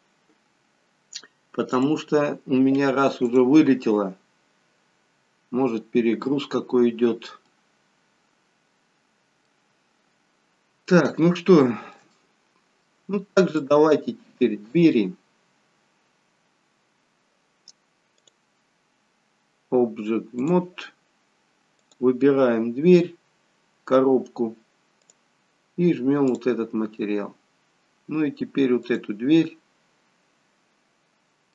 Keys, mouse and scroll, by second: 6.9-7.6 scroll down 1, 7.6 middle click, 7.6 scroll down 1, 9.8-10.5 scroll up 3, 11.0 middle click, 12.3 middle click, 13.7 click, 14.8 click, 16.2-16.8 scroll down 2, 16.8-17.6 scroll up 3, 18.7 click, 21.9 click, 25.2 click, 30.4 click, 31.1-31.5 scroll down 1.